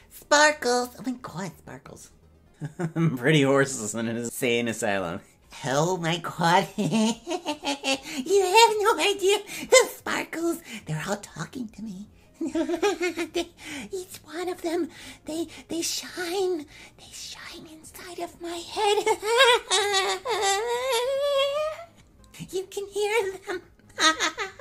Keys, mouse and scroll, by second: 2.5 KP_0.